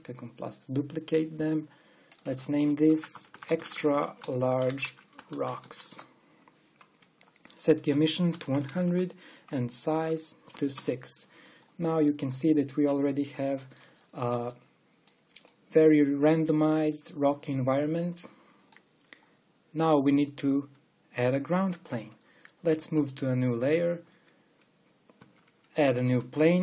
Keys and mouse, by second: 9.5 KP_0, 14.1 KP_5, 22.5 middle click, 24.2-25.3 drag, 25.6 click, 25.8 shift+a.